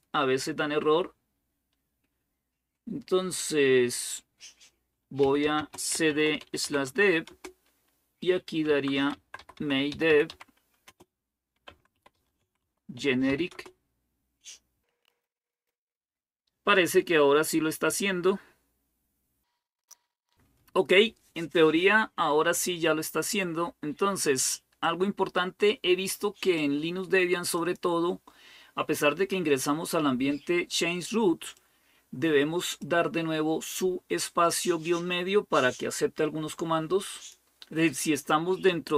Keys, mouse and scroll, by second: 4.8-7.1 typing, 8.5-13.8 typing, 19.9 Return, 24.6-28.4 drag, 31.3-32.7 drag, 36.9 click.